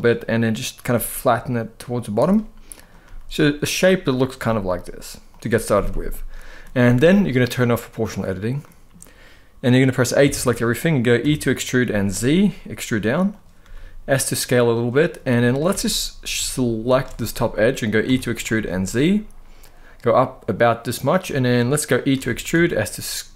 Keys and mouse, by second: 0.6 g, 1.9 click, 2.5 click, 2.7 g, 3.4 click, 4.1 g, 5.0 click, 6.3 middle click, 7.6 click, 8.3 middle click, 9.9 a, 10.9 e, 11.5 z, 13.0 click, 13.3 s, 14.9 middle click, 15.4 alt+a, 16.6 alt+shift+click, 16.9 middle click, 17.7 e, 18.2 z, 20.7 click, 20.9 middle click, 21.8 e, 22.2 s.